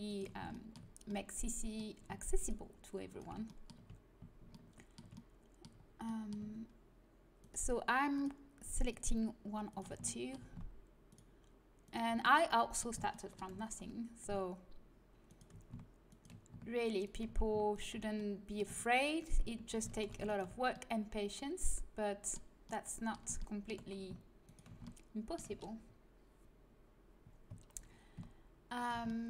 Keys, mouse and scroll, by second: 2.3-3.4 drag, 3.4-4.7 middle drag, 4.7 click, 5.1-7.3 middle drag, 7.3-8.5 drag, 8.5-11.2 right drag, 11.2-15.2 drag, 15.2-16.2 middle drag, 16.2-18.1 right drag, 18.1-19.9 middle drag, 19.9 ctrl+z, 19.9 right click, 20.7-22.1 middle drag, 24.4-28.7 middle drag, 28.7 right click, 29.0-29.2 middle drag.